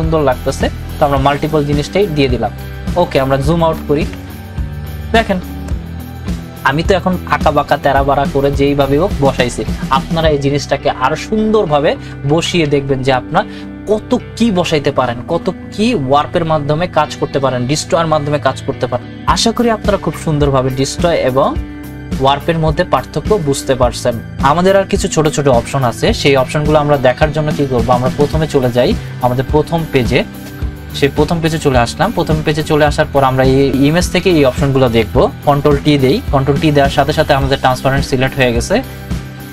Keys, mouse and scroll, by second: 1.5 click, 3.7 ctrl+-, 12.3 ctrl+-, 28.3 click, 28.4 click, 32.5 click, 35.8 ctrl+t, 39.3 right click.